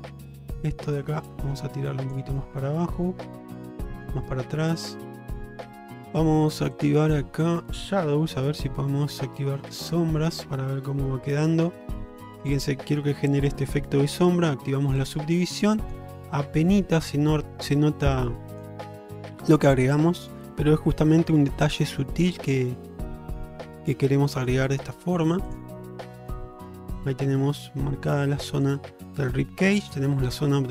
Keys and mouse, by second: 0.4 middle drag, 1.0-2.2 drag, 2.4-4.1 middle drag, 4.6 shift+middle click, 6.8-10.2 drag, 10.9 Tab, 12.0 middle click, 15.1 click, 15.6-16.0 middle drag, 18.6-20.5 drag, 20.9-21.4 middle drag, 23.8-24.6 middle drag, 26.2 shift+middle click, 26.5-28.7 middle drag, 29.8 middle click.